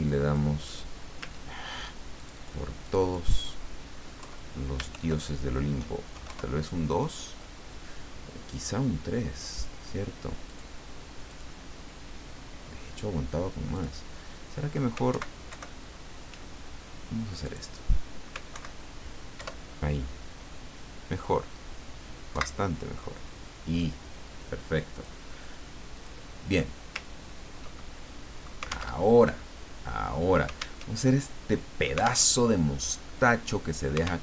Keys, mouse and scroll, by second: 0.0 click, 2.1 click, 2.8 click, 4.2 Left, 4.9 shift+End, 6.1 shift+KP_2, 6.2 shift+KP_Enter, 9.5 click, 10.4 click, 11.2 click, 13.7 click, 15.1 alt+Right, 17.4 click, 18.5 alt+Right, 19.3 alt+Up, 22.3 alt+Right, 24.9 click, 26.0 click, 26.5 click, 27.1 ctrl+scroll down 2, 27.8 ctrl+click, 29.0 alt+Tab, 30.8 alt+Tab, 32.3 alt+Tab.